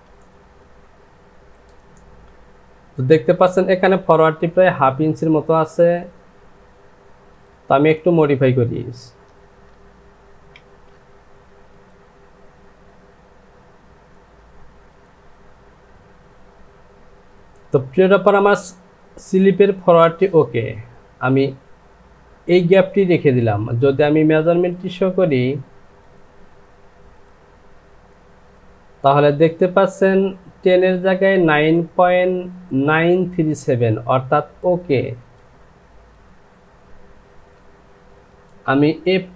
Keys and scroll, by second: 10.5 ctrl+z, 22.7 Delete, 27.9 space.